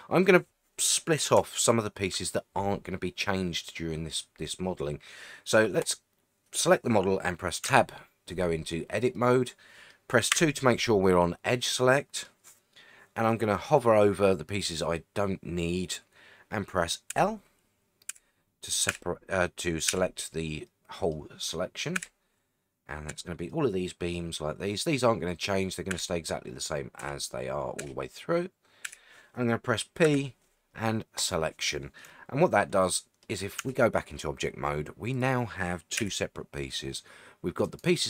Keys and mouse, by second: 1.6-2.1 shift+middle drag, 3.3-5.5 middle drag, 5.8 click, 7.6 Tab, 9.1 middle click, 10.3 2, 11.7 middle click, 17.1 l, 18.1 l, 18.9 l, 19.9 l, 20.6 middle click, 21.9 l, 23.1 l, 23.5 middle click, 24.6 middle click, 25.9 l, 27.0 l, 27.8 l, 28.8 l, 30.0 p, 32.1-33.2 middle drag, 33.6 Tab, 35.1 click, 36.0 g, 37.6 right click.